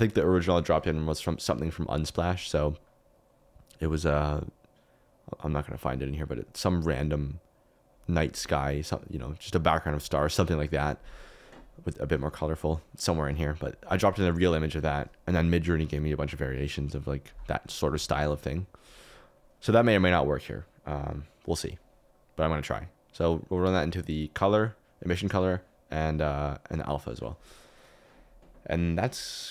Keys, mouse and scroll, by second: 20.9 click, 22.6-25.7 drag.